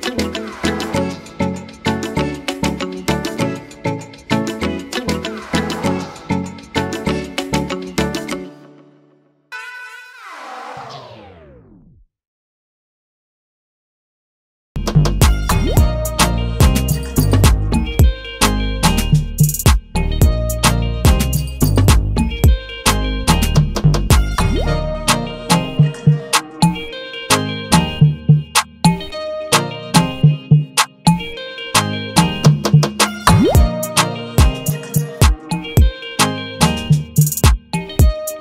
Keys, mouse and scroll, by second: 21.8 click, 23.2 click, 23.8 click.